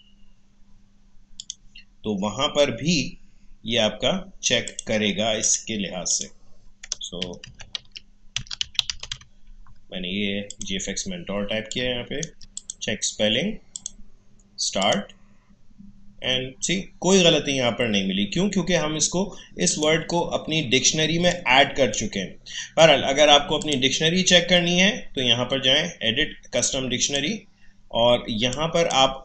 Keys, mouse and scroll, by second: 1.3 ctrl+n, 1.5 click, 4.6 click, 7.0-9.6 typing, 10.5 click, 12.7 click, 19.7-23.6 drag, 27.0-29.2 drag.